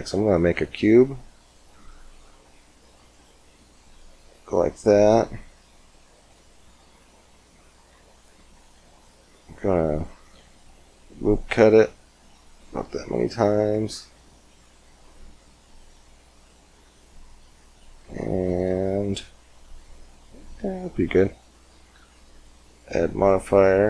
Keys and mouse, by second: 3.6 s, 7.8 Tab, 10.2 ctrl+r, 13.0 click, 19.9 middle click, 22.2 Tab, 22.9-23.8 drag.